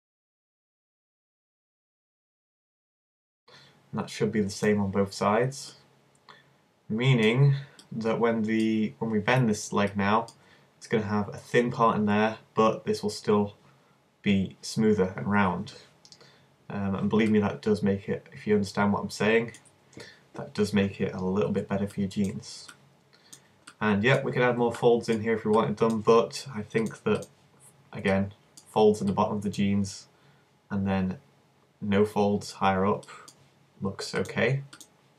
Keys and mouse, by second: 0.2 click, 0.2 z, 0.4 middle click, 0.6-2.0 middle drag, 2.1 middle click, 3.0 alt+m, 3.4 z, 6.5 middle click, 7.2-15.9 middle drag, 17.3-19.1 middle drag, 22.8-26.9 middle drag, 27.3-29.2 drag, 35.0-35.1 drag.